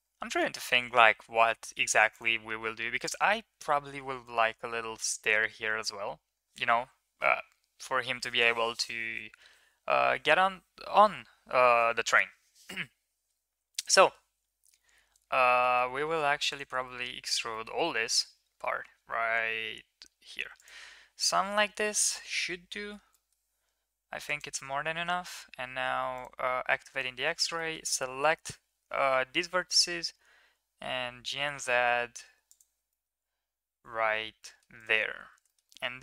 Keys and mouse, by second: 2.9 click, 15.4 middle click, 16.3 ctrl+click, 17.4 middle click, 18.0 e, 21.3 ctrl+KP_3, 23.0 middle click, 23.8 1, 26.0 click, 26.8 click, 27.4 shift+middle click, 29.2 g, 32.8 shift+middle drag, 33.8 Tab, 34.2 middle drag, 35.1 ctrl+s, 35.3 middle click, 35.5 middle click.